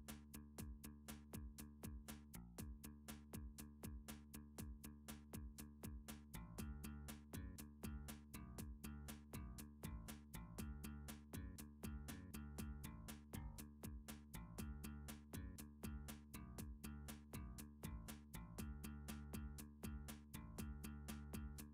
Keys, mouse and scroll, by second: 0.7 shift+middle click, 0.8 scroll, 1.3 shift+middle click, 1.5 shift+scroll, 2.5 Tab, 3.1 click, 3.4 Tab, 3.8 click, 4.0 click, 4.3 Tab, 4.9 click, 6.8 r, 8.7 click, 9.2 g, 10.1 y, 11.1 click, 13.3 middle click, 14.0 middle click, 15.0 r, 16.6 click, 17.2 3, 17.6 Tab, 18.0 click, 18.5-19.1 scroll, 19.3-19.9 shift+scroll, 20.2 shift+middle click, 20.3 shift+middle click.